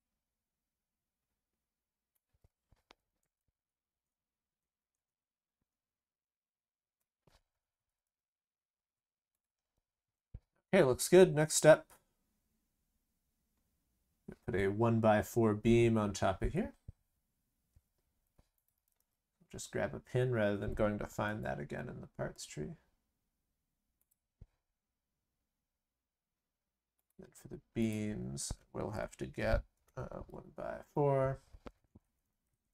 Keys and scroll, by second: 7.8 ctrl+c, 8.0 ctrl+v, 18.7 ctrl+c, 18.9 ctrl+v, 21.6 ctrl+v.